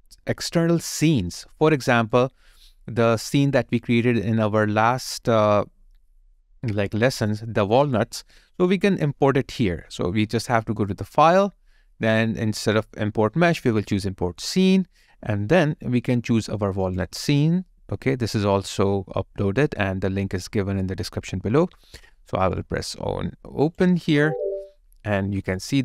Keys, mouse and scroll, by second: 0.4 alt+click, 1.5 alt+right click, 3.4 alt+right click, 3.5 alt+click, 4.0 alt+right click, 15.7-18.7 scroll down 1.